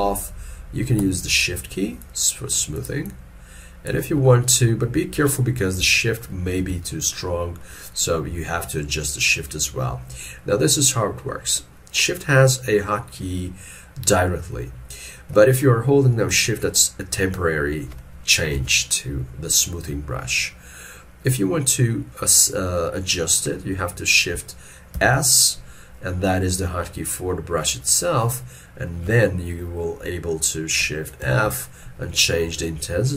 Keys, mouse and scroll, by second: 2.1 shift+click, 2.8 shift+click, 4.3 middle click, 5.0 middle click, 5.9 ctrl+z, 6.7 ctrl+z, 7.7 middle click, 16.7 shift+click, 18.6 ctrl+z, 25.0 shift+s, 31.3 shift+f.